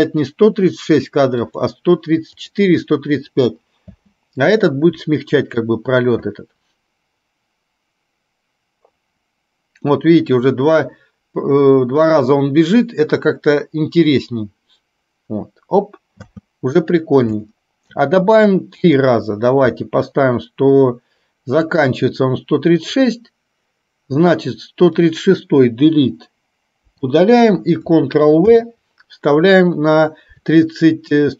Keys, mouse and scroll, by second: 1.5 click, 2.5 click, 4.1 space, 16.3 space, 17.6-18.0 shift+middle drag, 21.7 click, 25.0 click, 27.0 Delete, 28.6 ctrl+v.